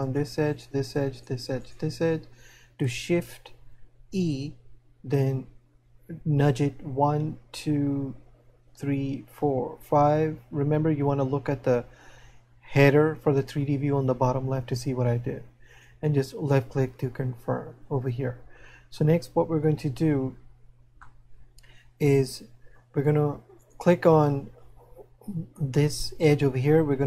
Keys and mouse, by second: 21.2 middle click.